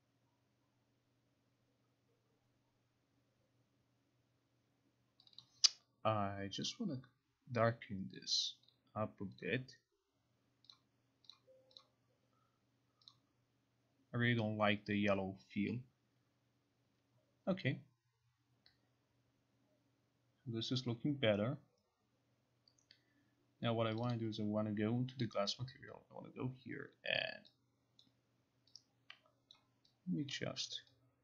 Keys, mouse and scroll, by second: 5.4 click, 5.5 click, 6.7 click, 8.2 click, 8.8 click, 9.5 click, 10.8 click, 11.4 click, 11.9 click, 13.2 click, 24.1 click, 24.2 click, 25.6 click, 28.1 click, 29.7 click, 30.4 click.